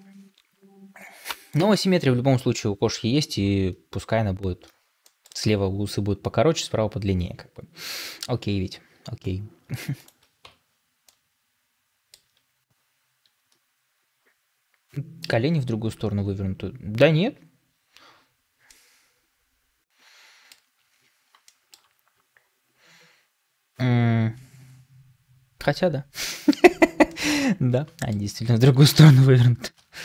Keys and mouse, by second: 4.9 middle drag, 7.9 shift+middle drag, 10.3 Tab, 11.0-12.2 middle drag, 18.6-20.5 middle drag, 21.4 shift+middle click, 26.2 shift+middle click, 27.0 middle click, 27.9 shift+middle click, 29.0 ctrl+l.